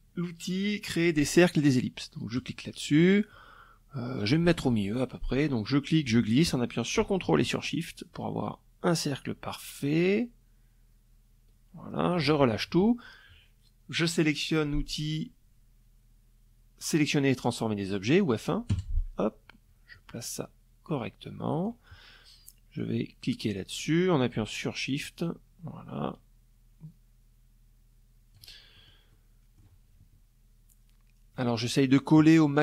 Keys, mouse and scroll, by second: 0.9 click, 4.2-10.9 drag, 17.3 F1, 18.5-20.4 drag, 21.3-27.1 drag, 27.3 shift+middle click, 27.7 shift+middle click, 27.7 shift+click.